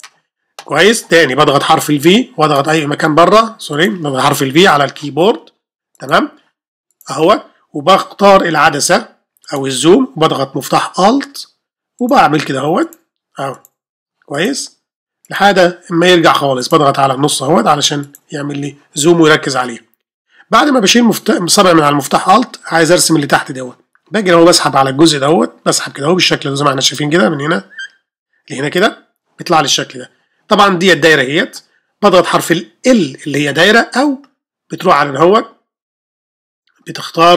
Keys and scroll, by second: 32.9 3.